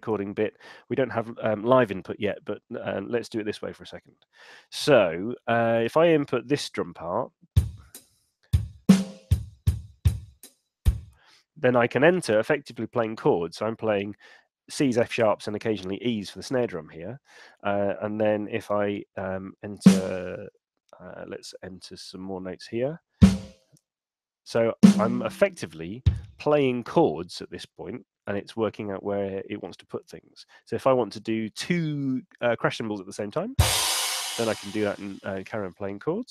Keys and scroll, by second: 4.0 5, 18.5 /.